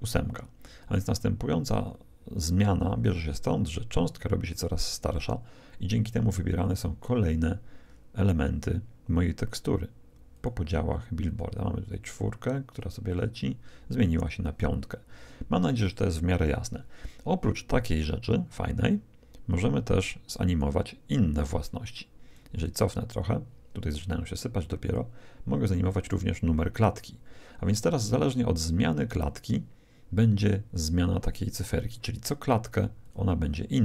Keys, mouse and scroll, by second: 9.5-13.5 drag, 13.6 click, 18.2-20.1 drag, 21.3-24.2 drag, 24.8-26.7 drag, 32.1-33.8 drag.